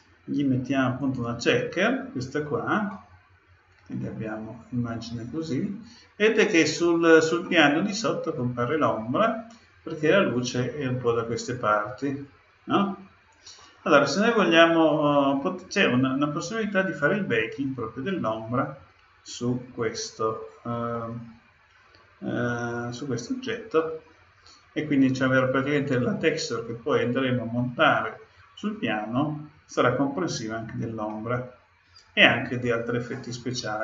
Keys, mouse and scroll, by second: 2.9-4.8 middle drag, 5.3-8.1 middle drag, 9.5-11.3 scroll down 2, 11.3-11.7 scroll down 1, 11.7-13.5 middle drag, 14.3-16.1 middle drag, 20.9-22.7 middle drag, 31.0-32.8 middle drag.